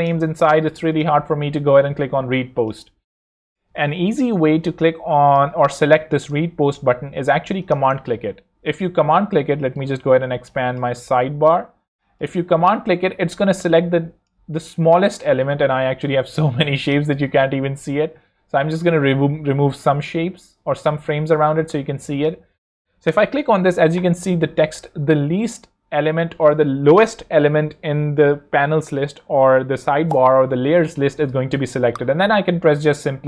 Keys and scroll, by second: 4.1 alt+l, 4.7 alt+z, 5.2 z, 17.2 shift+super+g.